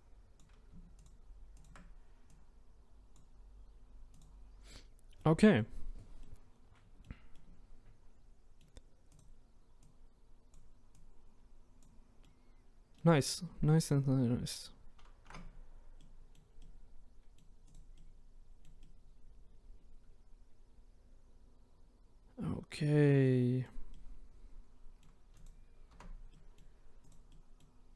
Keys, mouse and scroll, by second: 1.1 shift+click, 1.6 shift+click, 2.4 click, 4.2 click, 4.7-5.2 scroll down 1, 5.2 middle click, 5.9-6.2 scroll down 1, 6.2-9.2 middle drag, 9.2 click, 9.9 click, 12.2-13.9 middle drag, 13.9 click, 14.2-15.2 scroll up 1, 15.2 Tab, 16.0-17.7 middle drag, 17.7 click, 17.9-25.4 middle drag, 25.4 click, 25.9 Tab, 26.4 middle click, 27.1 click, 27.3-27.9 middle drag.